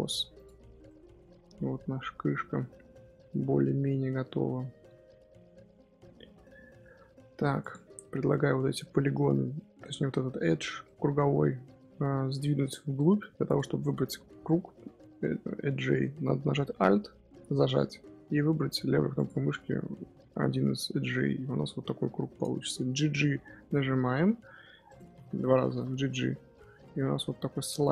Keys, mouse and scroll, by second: 0.6 Tab, 0.8-1.4 middle drag, 1.4 scroll down 1, 1.6-2.6 middle drag, 2.6-3.7 scroll down 1, 3.7-6.8 middle drag, 6.8 Tab, 7.0 2, 7.5 alt+click, 8.7-13.4 middle drag, 13.4 click, 14.6-18.9 middle drag, 19.1 alt+click, 21.4-24.2 middle drag, 24.2 g, 25.5 g.